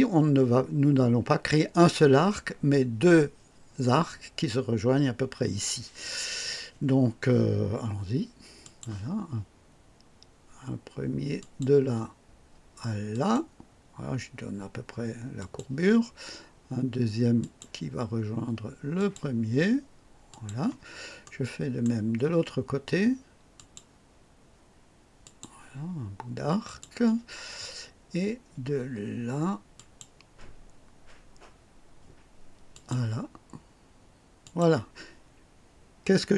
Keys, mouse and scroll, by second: 8.6 click, 11.3 click, 13.1 click, 15.3 click, 17.3 click, 18.9 click, 20.2 click, 21.2 right click, 23.5 click, 25.2 click, 26.6 click, 29.7 click, 32.7 click, 34.4 click.